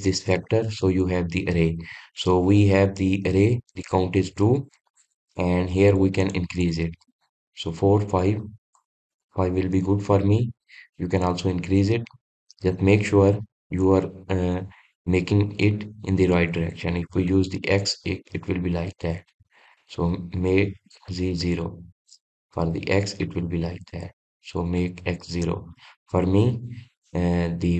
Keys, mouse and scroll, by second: 6.1-8.9 drag, 8.9-10.4 middle drag, 10.4-13.1 scroll down 2, 13.8-17.2 middle drag, 17.2-27.6 drag.